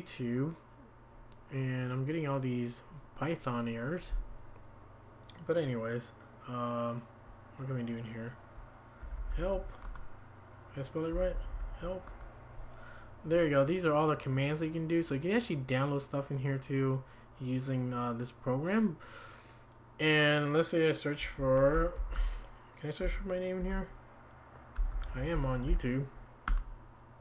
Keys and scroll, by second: 8.8-10.0 typing, 11.1-12.2 typing, 21.2-26.2 typing, 26.5 Return.